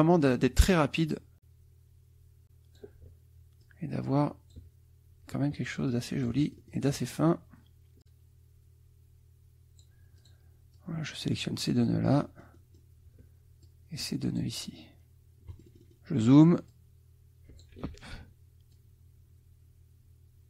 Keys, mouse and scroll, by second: 0.7-3.0 drag, 3.6-4.7 shift+drag, 5.9-7.1 shift+drag, 8.0-10.0 drag, 10.2 click, 10.7 click, 11.8-13.0 drag, 13.6 shift+click, 15.5 click, 16.7-17.8 drag, 17.9 ctrl+z, 18.7-20.4 drag.